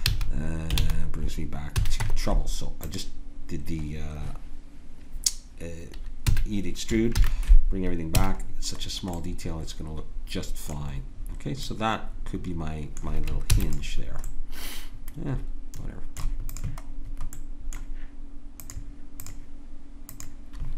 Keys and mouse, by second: 0.0 ctrl+z, 0.8 ctrl+z, 1.8 a, 2.0 Tab, 4.0 click, 6.3 a, 7.1 alt+h, 8.2 a, 13.5 ctrl+s, 16.5-18.7 drag.